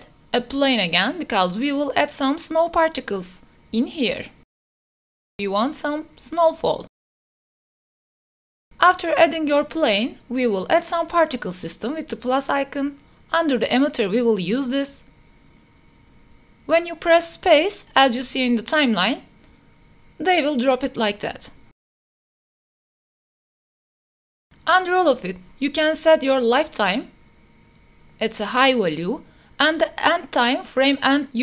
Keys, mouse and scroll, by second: 0.0 middle click, 0.1 ctrl+s, 0.3 shift+click, 0.4 shift+a, 1.7 click, 2.0-4.2 typing, 2.4 click, 3.0 click, 3.8 click, 5.0 drag, 5.5 g, 5.6 z, 6.4 drag, 6.8-9.0 typing, 7.2 shift+middle click, 9.4 ctrl+s, 10.2 click, 11.3 click, 15.6 click, 16.2 space, 21.1-22.7 typing, 23.0 click, 25.8 space, 30.7-31.4 drag.